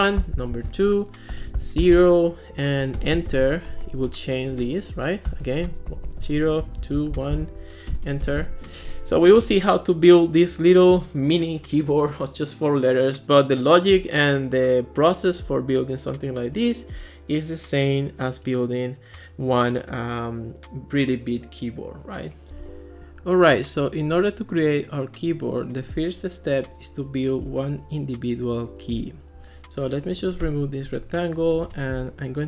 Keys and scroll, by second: 0.2 2, 1.3 0, 3.0 Return, 5.3-7.9 typing, 30.9 BackSpace.